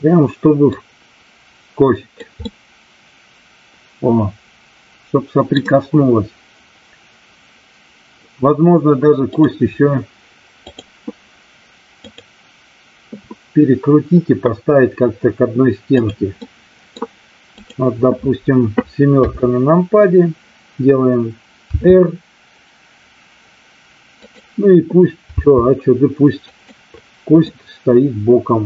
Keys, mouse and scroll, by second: 0.6-2.3 drag, 2.4-5.5 middle drag, 9.4-10.1 drag, 12.0-16.0 drag, 16.3 middle click, 17.5 click, 19.1 KP_7, 21.6 r, 24.1 click, 25.3 g, 26.4 click, 27.4-28.6 middle drag.